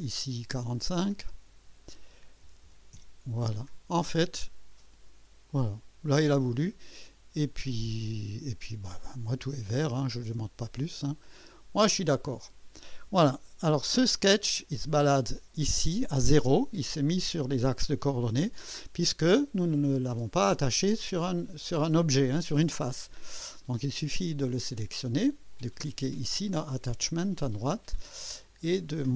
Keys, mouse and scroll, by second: 0.0 click, 1.1 click, 2.2-3.1 typing, 5.5-6.3 drag, 9.7 scroll down 1, 11.2 click, 13.8 1, 15.1-15.8 right drag, 25.5 click, 27.2 click.